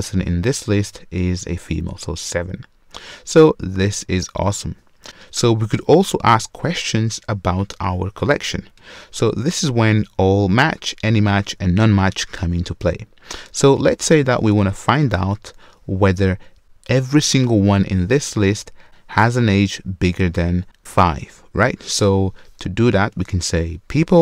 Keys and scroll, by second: 5.0 super+/.